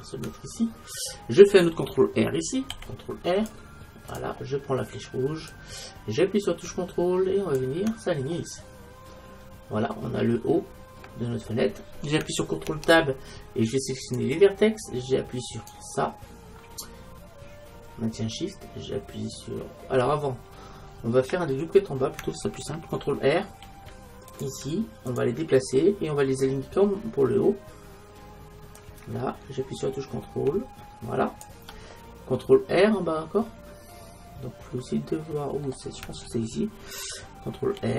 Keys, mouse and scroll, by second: 2.8 ctrl+r, 5.5-7.5 drag, 8.4-12.7 middle drag, 12.7 ctrl+Tab, 15.6-19.5 right drag, 21.0-23.0 middle drag, 23.7 ctrl+r, 25.4-27.0 drag, 25.9 right click, 25.9 middle click, 26.1 right click, 26.3 right click, 26.6 right click, 27.1 ctrl+r, 28.9-30.6 drag, 33.3-35.2 middle drag, 37.8 ctrl+r.